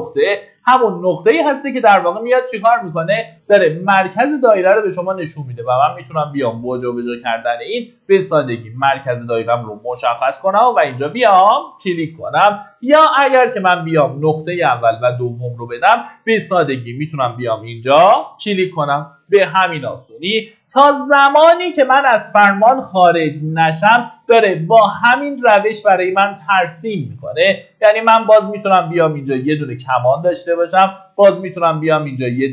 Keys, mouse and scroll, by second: 10.5 click, 11.2 scroll down 1, 12.1 middle click, 13.8 click.